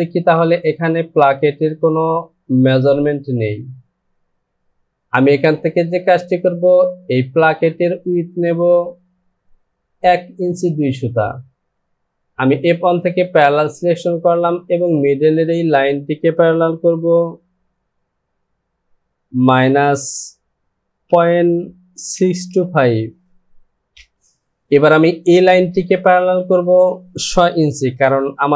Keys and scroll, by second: 11.7 ctrl+z, 19.5 KP_Subtract, 22.1 KP_6, 22.5 KP_2, 23.9 Return.